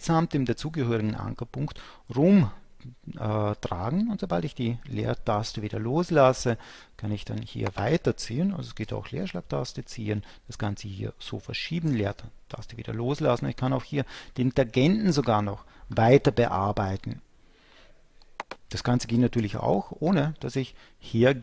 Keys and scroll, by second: 9.0 space, 19.7 space.